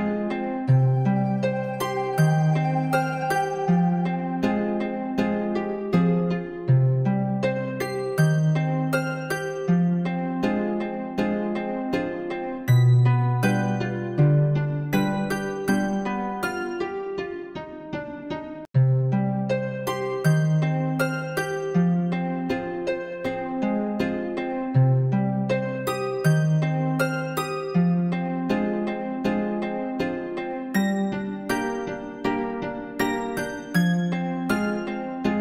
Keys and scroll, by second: 12.7 ctrl++, 15.5 space.